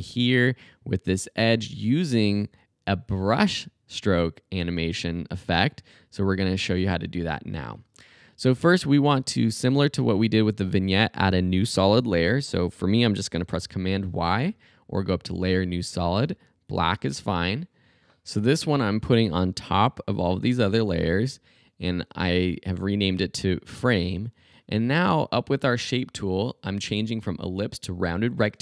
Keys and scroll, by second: 13.6 super+y.